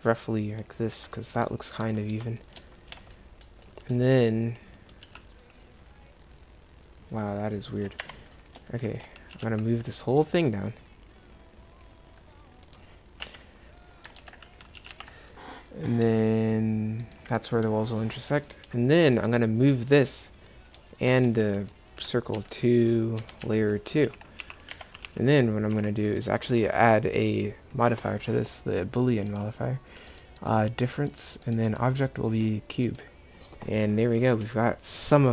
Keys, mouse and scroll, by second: 1.9 Tab, 2.2 Tab, 4.8-6.3 right drag, 5.1 g, 9.4 g, 13.3 KP_1, 14.3 ctrl+z, 14.8 g, 18.7 a, 22.4 n, 23.2 n, 23.5 m, 25.1 2, 25.8 1.